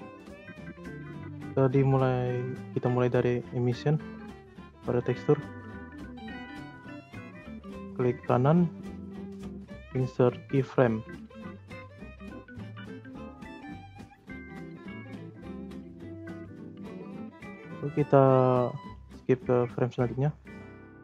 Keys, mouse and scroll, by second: 0.3 click, 1.2 click, 1.7 click, 2.3-3.0 scroll up 4, 3.0 middle click, 3.3-4.1 scroll up 2, 4.1-4.5 scroll up 2, 4.5-5.5 middle drag, 5.5 scroll up 1, 5.6-8.1 shift+middle drag, 8.1-11.1 right drag, 17.3-19.2 drag, 19.2-19.7 scroll down 2, 19.7-21.0 shift+middle drag.